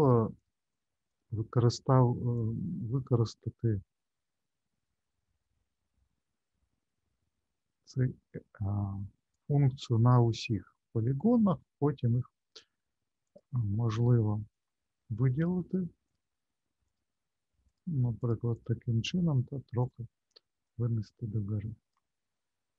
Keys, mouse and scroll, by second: 0.0 click, 0.7 click, 1.1 shift+click, 2.3 click, 10.2 shift+middle click, 13.2 click, 14.5 click, 15.3 click, 16.0 shift+click, 16.8 shift+click, 17.7 shift+click, 18.2 shift+click, 18.5 shift+click, 19.8 click, 20.6 click, 22.4 shift+middle click.